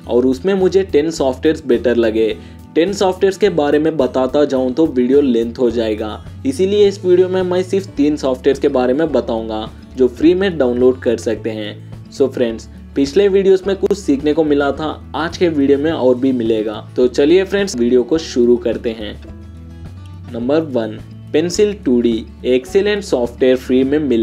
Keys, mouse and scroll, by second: 4.2 click, 4.9 click.